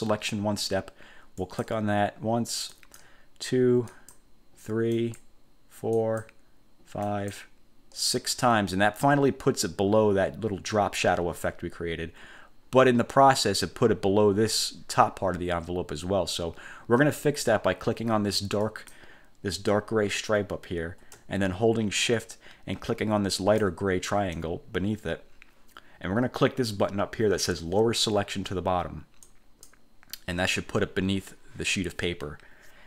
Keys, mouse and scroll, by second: 1.5 click, 2.8 click, 4.0 click, 5.0 click, 6.1 click, 7.1 click, 18.8 click, 23.5 shift+click, 29.4 click.